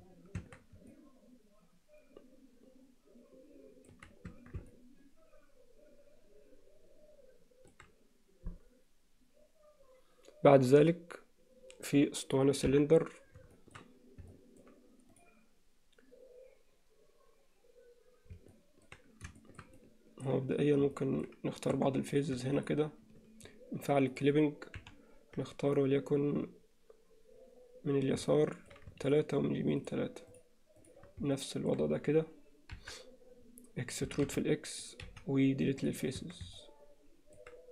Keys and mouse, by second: 0.4 Tab, 0.9-3.9 middle drag, 4.3 Tab, 4.7-7.8 alt+middle drag, 12.7 KP_1, 13.6 shift+middle click, 14.3 alt+middle click, 15.2 click, 18.6 middle click, 19.4 alt+shift+middle click, 19.8 middle click, 21.0 middle click, 21.8 3, 22.6 shift+click, 24.1 click, 24.8 KP_7, 28.3 middle click, 29.0 shift+click, 31.4 middle click, 32.8 KP_7, 34.1 e, 35.0 x, 36.2 Tab, 36.6-37.4 middle drag.